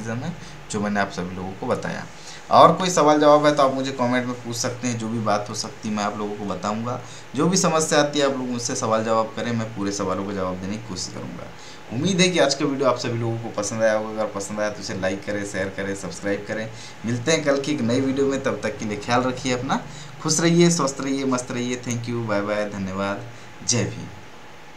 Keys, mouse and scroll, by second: 1.6 click.